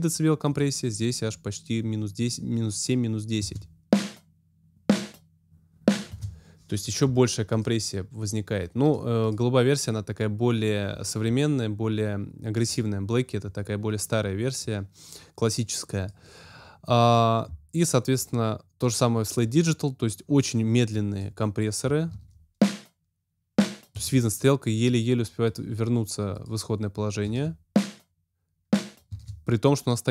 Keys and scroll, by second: 3.3 space, 6.0 space, 22.0 space, 23.9 space, 27.2 space, 29.0 space.